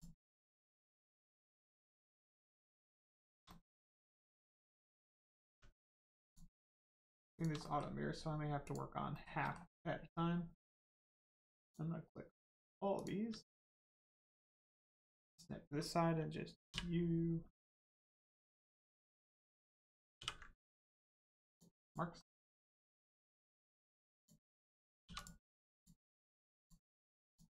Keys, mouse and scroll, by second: 2.0 middle click, 2.4 scroll up 1, 2.7 middle click, 3.2 shift+middle click, 3.4 middle click, 3.5 middle click, 5.4 Tab, 5.8 middle click, 6.2 click, 6.6 middle click, 7.3 shift+click, 7.6 middle click, 8.6 shift+click, 9.1 shift+middle click, 9.4 middle click, 10.6 shift+click, 11.6 shift+click, 12.3 shift+click, 12.9 shift+click, 15.2 click, 16.6 u, 18.5 middle click, 21.4 click, 22.1 middle click, 23.4-24.1 scroll up 1, 24.1 click, 25.0 2, 25.1 click, 25.7 shift+click, 26.6 shift+click, 27.2 shift+click.